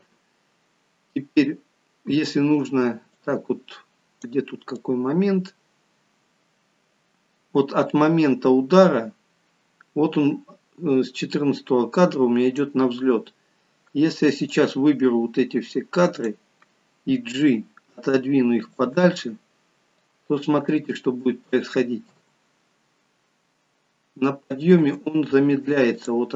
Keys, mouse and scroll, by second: 0.6-1.5 scroll down 6, 3.2 click, 4.9 click, 14.6 click, 17.5 g, 20.1 click, 22.1 space, 24.8 space, 26.0 click.